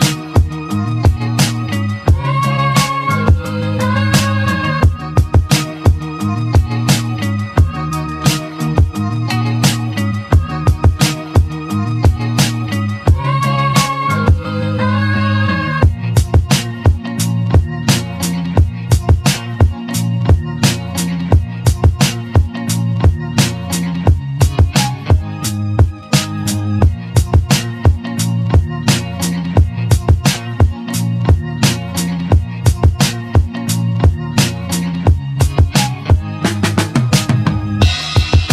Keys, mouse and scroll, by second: 3.1 Tab, 3.5-4.0 drag, 4.7 shift+a, 14.0 g, 26.7 click, 26.9 scroll down 2, 27.2-27.8 scroll up 2, 27.8 click, 29.0 click, 29.8 s.